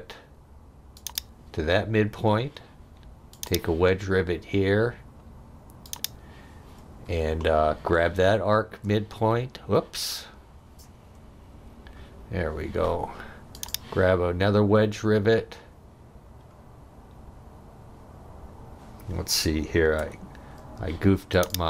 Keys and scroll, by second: 11.6 Escape, 20.0 Escape.